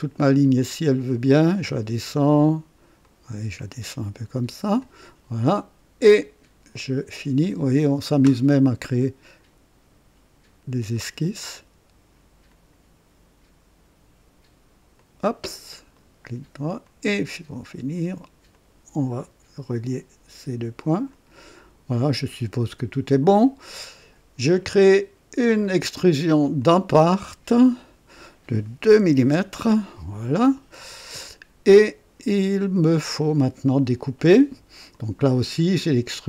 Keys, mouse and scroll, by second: 0.5-2.0 drag, 2.9-4.9 drag, 6.9 click, 10.9 click, 12.4 click, 14.9 click, 15.9 right click, 16.8 click, 18.4 click, 21.0 click, 22.7 click, 25.5 click, 26.6 click, 27.7 click, 28.9 KP_2, 29.2 KP_Enter, 30.8-33.4 drag, 34.8 click, 36.1 click.